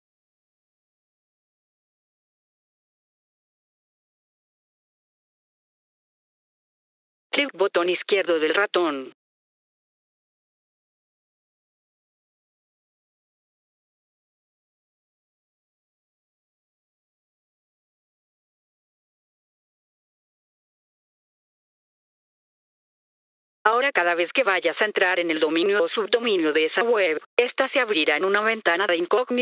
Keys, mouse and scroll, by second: 3.4 F4, 3.9 right click, 6.1 click, 6.8 F4, 7.2 click, 9.9 click, 13.0 click, 13.8 right click, 15.5 click, 18.8 click, 23.4 F4, 23.5 click, 25.7 click, 26.0 click, 28.3 click.